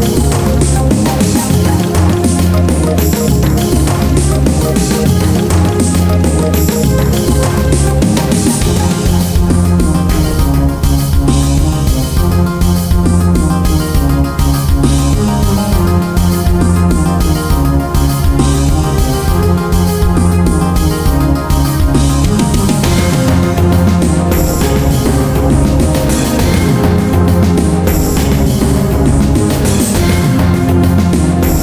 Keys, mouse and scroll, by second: 1.1 click, 4.4 right click, 5.4 click, 7.9-8.3 scroll down 1, 8.4-8.9 scroll up 2, 9.3-10.0 scroll up 1, 10.1-12.7 scroll up 1, 13.0 scroll down 1, 13.1-13.6 scroll up 1, 13.6-16.2 scroll down 1, 16.2-17.7 scroll up 1, 17.7-18.0 scroll down 1, 19.4-21.6 scroll up 1, 21.6 click, 21.9 middle click, 22.7 shift+middle click, 23.0 scroll up 1, 23.2 middle click, 23.9-24.3 scroll down 2, 24.3 middle click, 24.5 scroll up 1, 25.0 middle click, 25.2 Tab, 25.3-25.8 scroll down 1, 25.8 middle click, 26.5 scroll up 1, 26.7 Tab, 26.9 middle click, 27.2 scroll up 1, 27.7 middle click, 29.6 ctrl+click, 30.3 middle click, 30.7 scroll down 1, 30.9 middle click.